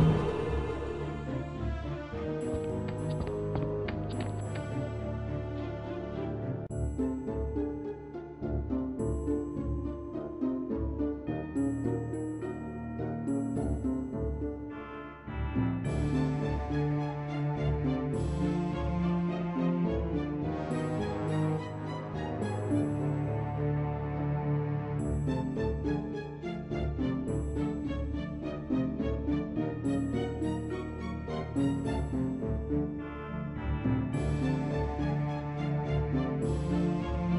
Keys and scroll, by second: 0.0-5.1 typing, 18.0-19.2 typing.